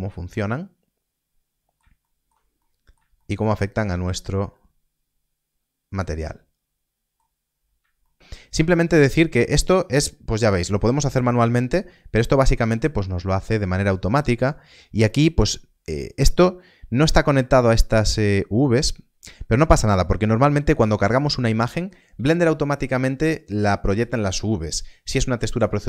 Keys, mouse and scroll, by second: 0.3 middle click, 2.0 shift+middle click, 3.1 shift+middle click, 4.0 scroll up 1, 4.5 middle click, 7.3 scroll down 1, 8.0 shift+middle click, 12.5 click, 12.6 scroll up 1, 13.2 middle click, 15.5-16.1 scroll down 1, 16.2 click, 20.4 middle click, 20.8 scroll down 1, 21.5 middle click.